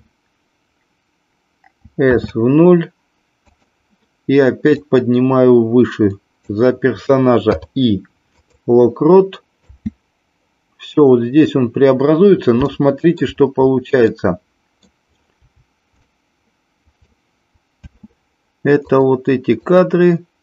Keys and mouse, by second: 1.8 s, 2.1 KP_0, 3.4 click, 4.6-6.4 drag, 7.4 i, 9.6 space, 12.7 shift+middle click, 14.1 middle click, 16.0-17.2 shift+middle drag, 17.9 space, 18.8 click, 19.7 click.